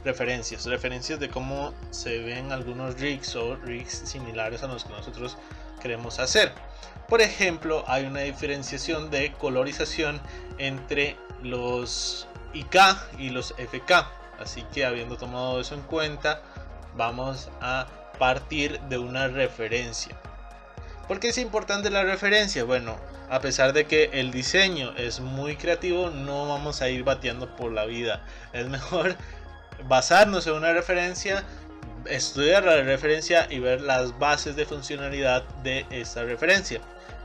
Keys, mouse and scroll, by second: 8.3-9.1 scroll down 5, 9.1-12.1 middle drag, 13.0 click, 13.9 click, 14.7-17.6 middle drag.